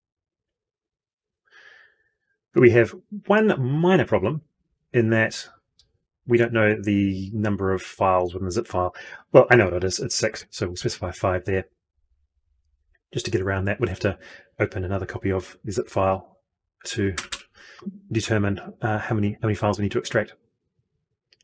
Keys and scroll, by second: 0.4 ctrl+y.